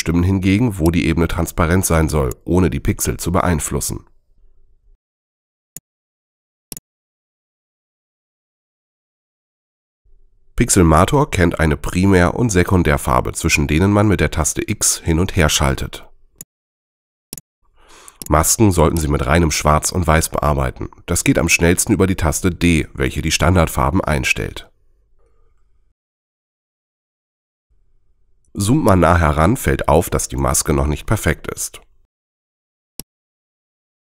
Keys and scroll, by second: 4.5 super+z, 13.2 x, 17.7 x, 19.5 x, 22.7 d, 24.3 x, 27.8 z.